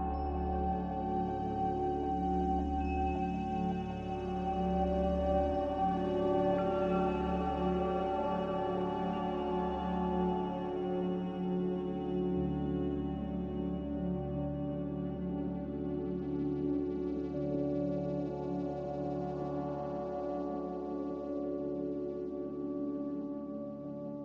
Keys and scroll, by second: 0.0 z, 4.2 ctrl+c, 7.2 ctrl+v, 17.2 ctrl+c, 20.4 a, 20.8 m.